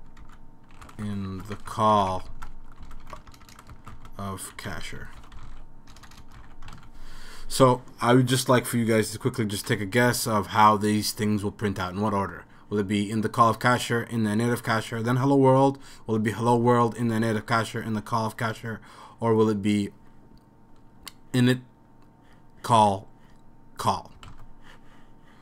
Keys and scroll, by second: 0.0-6.9 typing, 7.2 super+s, 24.3 super+s.